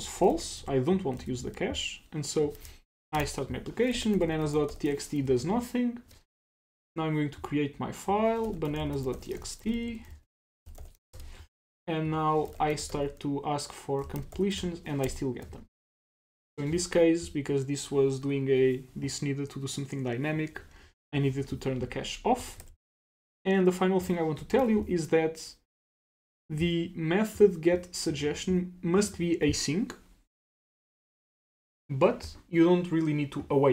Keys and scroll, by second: 0.6 super+s, 1.2 super+s, 22.6 super+w, 24.5 super+BackSpace.